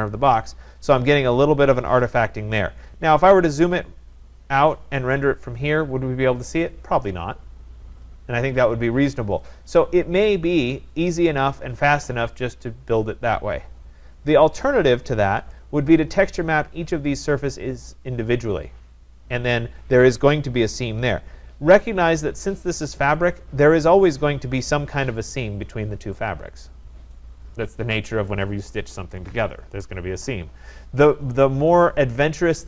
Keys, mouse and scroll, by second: 3.8-4.1 scroll, 4.6 scroll, 11.6 right click, 15.6-20.7 drag, 23.3-24.3 drag, 24.3-25.6 scroll up 2, 25.6 scroll up 1, 25.7 middle click.